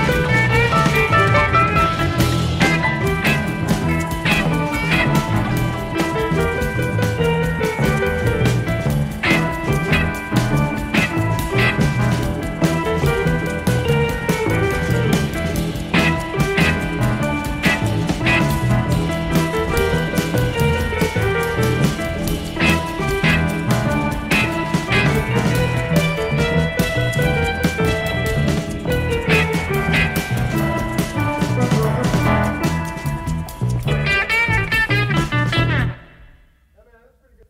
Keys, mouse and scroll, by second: 0.6 KP_Subtract, 4.0 click, 5.5-8.0 drag, 8.6 click, 12.3 KP_Add, 14.3 space, 19.4 F6, 19.9 click, 21.0 click, 22.4 ctrl+z, 23.5 F7, 23.9 click, 26.4 shift+F6, 29.9 click, 32.7 KP_Add, 33.9 click, 34.4 space.